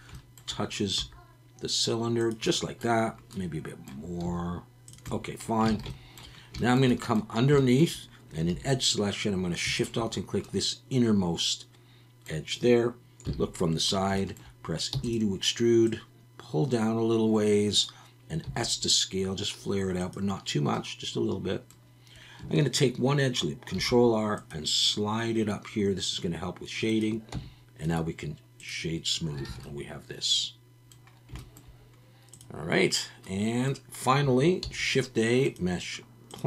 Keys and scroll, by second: 1.0 s, 4.3 s, 5.7 alt+a, 8.5 2, 13.2 KP_3, 14.9 e, 20.0 s, 23.8 ctrl+r, 27.3 Tab, 29.5 alt+a, 34.6 shift+a.